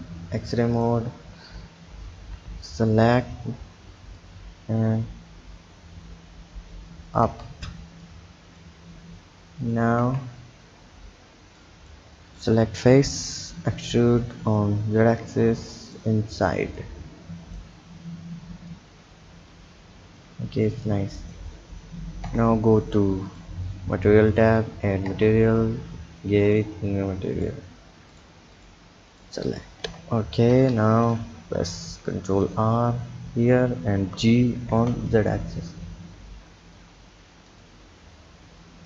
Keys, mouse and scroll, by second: 0.4 click, 1.6 n, 2.2 n, 2.5 b, 4.2 drag, 7.3 Tab, 8.1 click, 9.6 click, 10.0 Tab, 10.4-11.6 scroll up 1, 11.6-12.3 drag, 13.3 e, 16.8 click, 18.7 click, 20.8 click, 22.3 Tab, 23.3 click, 24.3 click, 25.1 Tab, 26.5-29.9 drag, 29.9 Tab, 30.5 Tab, 31.8 ctrl+r, 34.0 g.